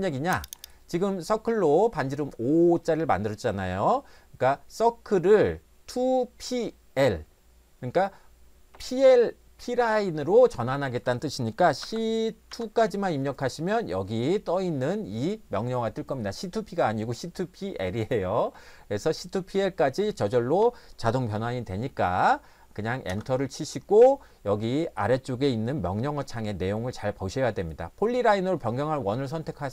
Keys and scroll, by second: 11.8-12.5 typing, 23.1 Return.